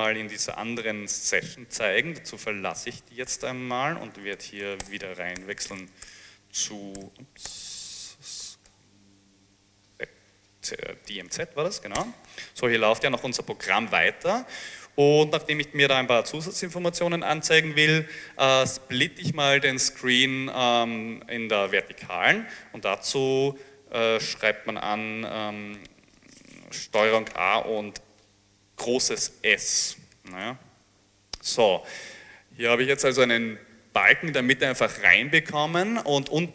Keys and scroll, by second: 2.9 ctrl+a, 3.4 ctrl+d, 4.0-6.0 typing, 6.1 Caps_Lock, 6.1 Tab, 7.5-9.2 typing, 9.7 Tab, 11.0-11.8 typing, 12.0 Return, 29.6 ctrl+a, 30.4 ctrl+shift+s.